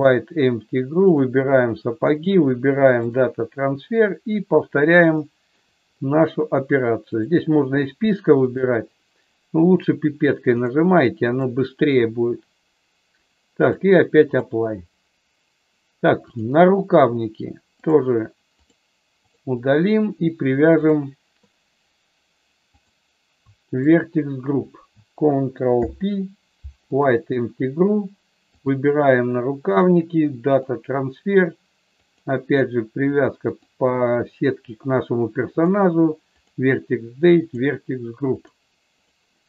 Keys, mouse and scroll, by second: 1.0 click, 2.1-3.1 drag, 5.3 shift+middle click, 7.0 click, 10.5 click, 11.3 click, 11.8 click, 13.6 click, 16.3 click, 17.9 click, 19.2 click, 22.9 click, 25.6 ctrl+p, 28.5 click, 29.8-30.8 drag, 32.0 click, 35.5 click, 36.3 click, 37.5 click, 38.3 click.